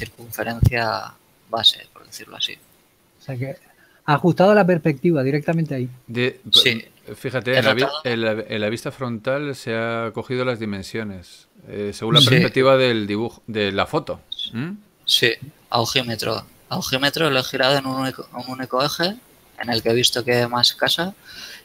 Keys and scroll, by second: 0.2 s, 9.5 z, 16.8 r, 17.5 x.